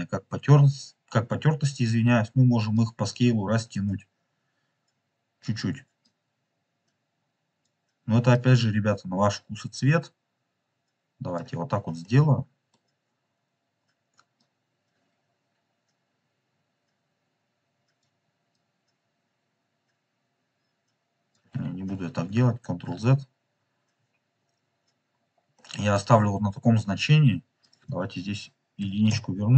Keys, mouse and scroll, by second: 3.0-5.7 drag, 6.2-7.6 drag, 8.3-11.0 drag, 11.2 click, 11.5-12.1 scroll down 3, 12.1-12.7 middle drag, 14.3-17.3 drag, 18.5-21.3 drag, 21.8 ctrl+z, 22.2 ctrl+z, 23.9 ctrl+z, 24.1 scroll up 3, 25.0-25.4 scroll down 2, 25.5-26.0 middle drag, 27.5-29.2 drag.